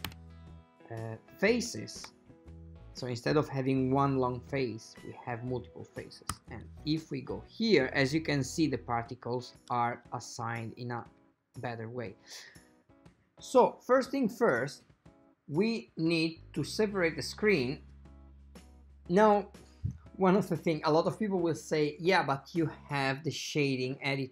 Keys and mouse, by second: 0.0 a, 0.2 a, 2.5 shift+middle click, 6.5 Tab, 8.6-9.9 shift+middle drag, 16.6-19.3 drag, 19.9 click.